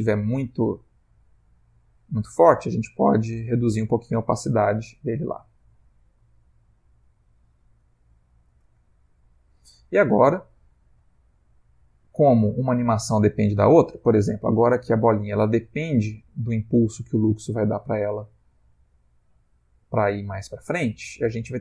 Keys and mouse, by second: 1.3 click, 2.9 middle click, 3.9 middle click, 5.0 click, 8.1 ctrl+middle click, 8.9 shift+middle click, 11.8 click.